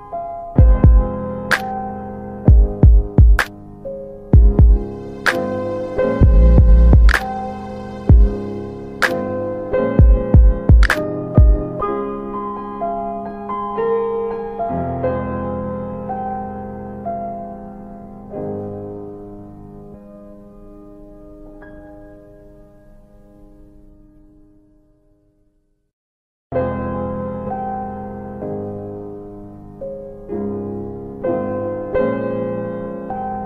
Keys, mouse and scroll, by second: 0.7 alt+middle click, 3.5 click, 5.0 right click, 5.6 alt+middle click, 7.4 alt+middle click, 7.4-7.7 scroll down 1, 8.0 middle click, 8.8 alt+middle click, 11.4 click, 12.2 right click, 13.3 typing, 14.8 click, 16.2 double click, 17.0 alt+middle click, 17.4 middle click, 18.0 ctrl+click, 22.4 alt+middle click, 23.2 click, 24.8 ctrl+shift+r, 27.2 alt+middle click, 27.3 alt+w, 27.9 alt+w, 30.4 right click, 33.0 middle click.